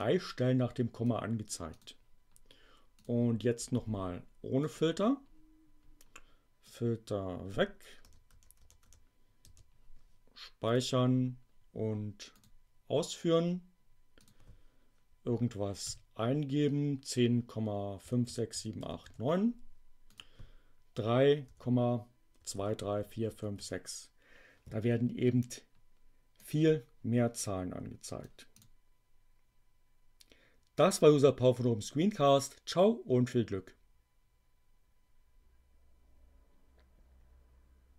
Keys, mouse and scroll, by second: 0.0-1.2 drag, 1.6 click, 3.0 click, 4.6 click, 6.6-7.6 drag, 8.0 BackSpace, 9.4 space, 10.7 click, 14.1 click, 15.8 ., 17.7-19.4 typing, 20.1 click, 21.5-24.0 typing, 26.3-28.3 drag, 28.5 click.